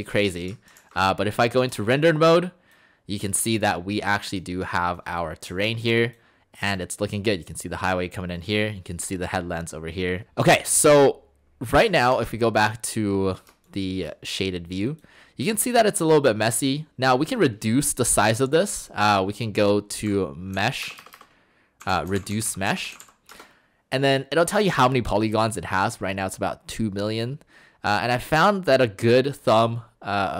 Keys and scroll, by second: 5.5 Escape, 19.8-23.4 typing.